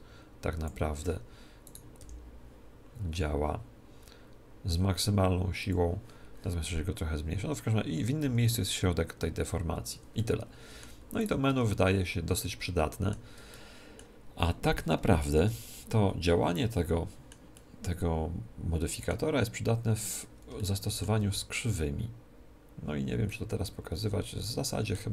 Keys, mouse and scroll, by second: 1.7 right click, 2.0 g, 5.7 click, 8.2 g, 10.2-15.3 middle drag, 11.2 right click, 11.5 Tab, 12.2 Tab, 15.0 a, 15.4 Tab, 16.2-19.4 middle drag, 19.7-20.6 scroll up 1, 20.6-22.5 middle drag, 23.2-25.0 middle drag.